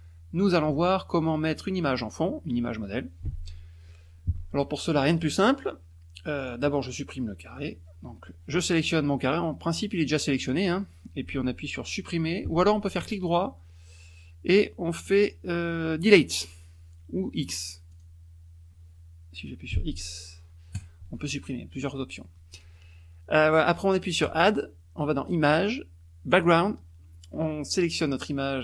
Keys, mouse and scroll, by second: 5.4 click, 6.4 click, 10.5 click, 13.0 right click, 17.9 click, 19.7 x, 20.7 click, 24.2 click, 26.3 click, 27.9 click.